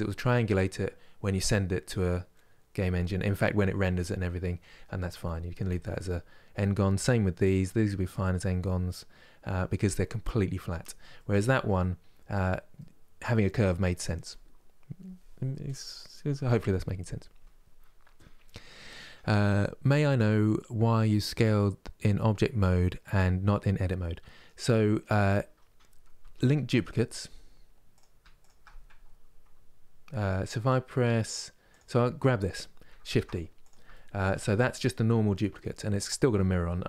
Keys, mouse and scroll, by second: 3.3-3.7 scroll down 1, 3.7-10.4 middle drag, 10.8-15.5 middle drag, 23.6 middle click, 24.4-25.3 scroll down 1, 25.3-25.8 scroll down 1, 25.8 Tab, 26.1 middle click, 27.0-27.6 scroll down 1, 27.6-31.0 drag, 31.3-32.8 drag, 32.8 shift+d, 33.6-36.8 shift+middle drag.